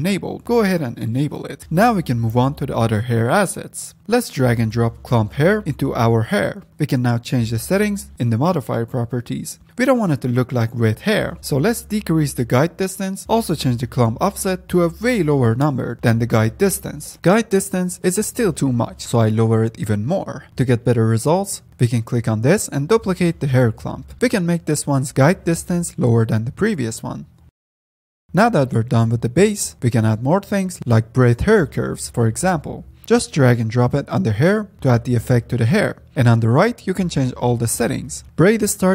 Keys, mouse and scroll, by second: 1.1 click, 1.5 scroll down 2, 1.7-4.0 middle drag, 4.0 F10, 4.1-4.5 middle drag, 4.5-5.3 scroll up 2, 5.3-6.0 drag, 6.5 middle click, 6.7-7.6 scroll up 8, 7.6-9.7 drag, 9.7 middle click, 10.4-13.2 drag, 14.2 middle click, 15.5 click, 16.6 ctrl+z, 17.1 middle click, 17.8-20.2 drag, 20.2 middle drag, 20.5 F9, 22.8-24.5 drag, 24.5 scroll up 2, 24.6-25.5 scroll down 6, 25.5 click, 26.7-28.2 drag, 28.2 F10, 29.2 scroll down 2, 29.5-30.5 scroll up 3, 30.5-31.7 middle drag, 31.7-32.1 scroll up 1, 32.1-33.0 middle drag, 33.0-33.8 drag, 34.3-36.1 middle drag, 36.1 click, 36.4-37.6 scroll down 4, 37.6 ctrl+s, 38.2-38.9 scroll up 1.